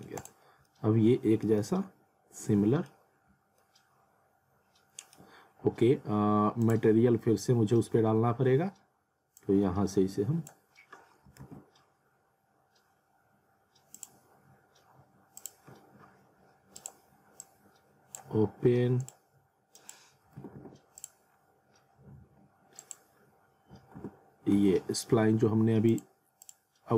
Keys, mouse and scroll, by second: 0.2 click, 0.5 scroll up 1, 0.7 alt+middle click, 1.6 alt+middle click, 3.2 scroll up 1, 3.6 alt+middle click, 6.7 click, 9.4 click, 11.4 ctrl+z, 13.9 click, 19.6 click, 20.4 alt+w, 21.0 click, 21.3-21.8 scroll up 1, 22.8 click, 24.0 w, 25.9 click.